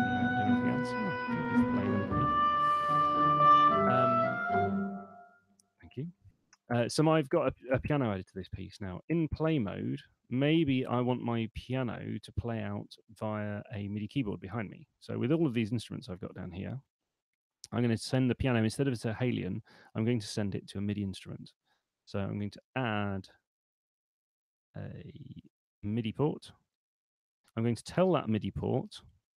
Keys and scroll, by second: 1.2 space, 2.2 super+2, 5.8 super+1.